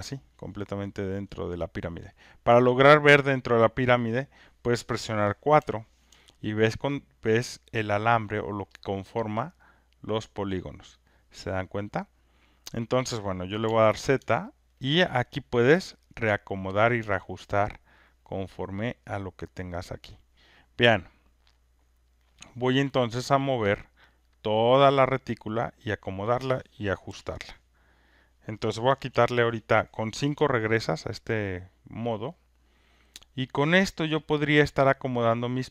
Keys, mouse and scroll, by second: 1.3 click, 8.3 alt+click, 11.6 alt+click, 12.8 alt+click, 14.7 alt+right click, 15.1 alt+click, 16.8 click, 23.1 click, 26.1 click, 27.1 click, 28.4 click, 28.4 r, 29.1 5, 33.5 alt+click, 34.0 alt+middle click, 35.6 alt+click.